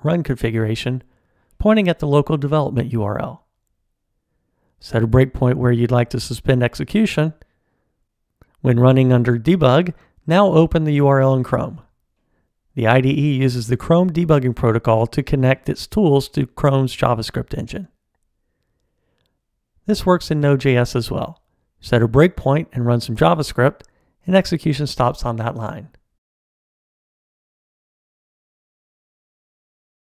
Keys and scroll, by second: 5.2 super+F8, 9.0 ctrl+alt+d, 22.5 super+F8, 23.7 ctrl+alt+d.